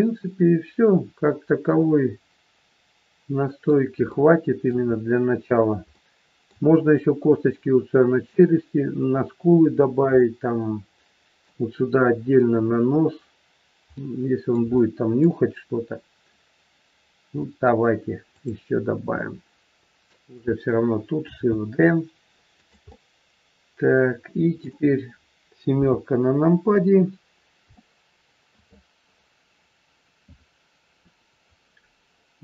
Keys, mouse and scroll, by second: 4.0 shift+middle click, 4.9-5.4 scroll up 4, 5.4 scroll down 2, 5.9 shift+middle click, 9.8-10.1 scroll down 2, 10.1 middle click, 14.0 middle click, 14.6 shift+middle click, 15.3 scroll up 2, 16.0-17.0 scroll down 1, 17.2 middle click, 18.2 click, 19.1 middle click, 21.2 shift+d, 22.9 middle click, 24.9-25.7 scroll down 2, 25.7 KP_7, 26.6-27.5 scroll up 4, 27.7 shift+middle click, 29.0-29.5 scroll up 2, 29.5-29.9 scroll down 2.